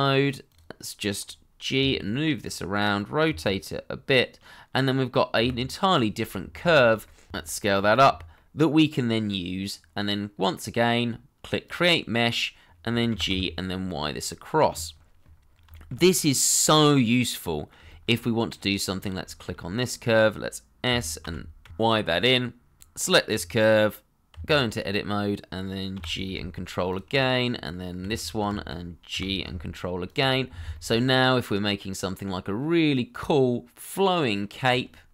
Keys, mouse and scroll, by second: 1.1 scroll up 1, 1.7 g, 3.2 r, 5.0 g, 5.6 scroll down 1, 5.7 shift+middle click, 5.9 middle click, 7.2 s, 8.3 middle click, 12.7-13.1 scroll down 1, 13.1 g, 13.3 y, 15.4 scroll down 1, 15.7 shift+middle click, 16.0 middle click, 17.8 shift+middle click, 20.4 scroll up 1, 20.8 s, 21.2 z, 21.6 x, 21.7 y, 24.3 Tab, 26.9 ctrl+click, 28.0 alt+q, 29.1 g, 30.0 ctrl+click, 30.3-30.7 scroll down 1, 30.7 middle click, 34.6-34.9 scroll up 1, 34.9 middle click.